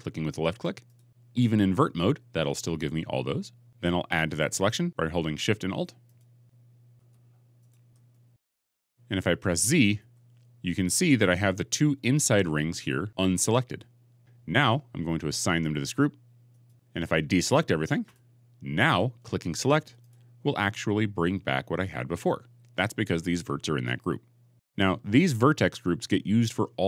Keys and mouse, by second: 0.8 alt+click, 5.9 alt+shift+click, 8.4 middle click, 9.8 z, 12.9 middle click, 16.5 click.